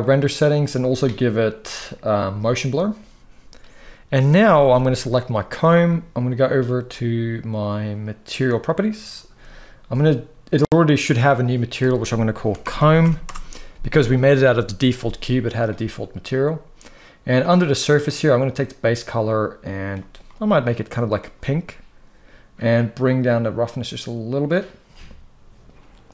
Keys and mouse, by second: 2.3 click, 4.3 ctrl+s, 4.4 ctrl+s, 5.0 click, 8.2-13.0 drag, 18.0 drag, 22.9-24.1 drag, 26.0 click.